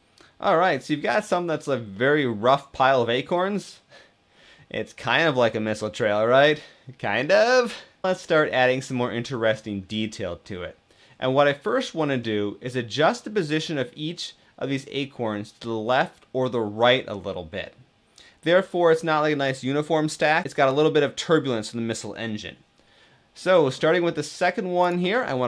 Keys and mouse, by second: 1.6-6.9 middle drag, 8.1-9.1 middle drag, 9.9-10.3 middle drag, 11.6 middle click.